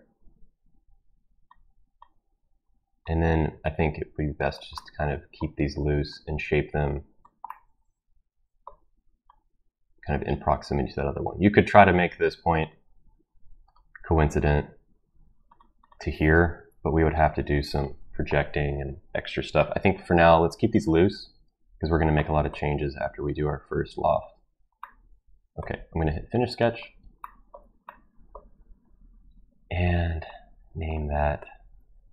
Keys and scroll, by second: 16.5 Escape, 31.6 ctrl+v.